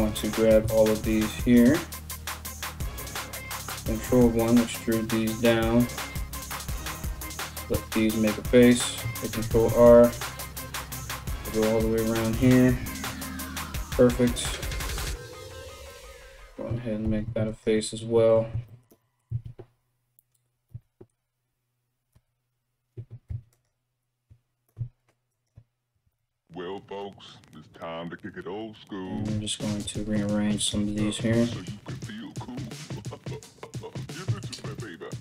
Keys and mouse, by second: 1.0 ctrl+right click, 1.2-6.2 ctrl+middle drag, 2.7 ctrl+KP_1, 3.7 e, 6.2 right click, 6.4 middle click, 6.7 right click, 6.8-24.9 middle drag, 7.3 f, 8.9 ctrl+r, 13.9 click, 14.5 click, 14.9 click, 16.7 ctrl+r, 18.9 1, 20.3 3, 21.8 z, 22.9 1, 23.1 right click, 24.9 ctrl+right click, 25.1-28.0 ctrl+middle drag, 25.7 alt+q, 25.8 alt+q, 26.6 g, 28.0 right click, 28.2-35.2 middle drag, 28.3 g, 29.3 right click, 29.5 g, 30.2 right click, 30.3 g, 31.6 right click, 31.8 g, 35.1 ctrl+r.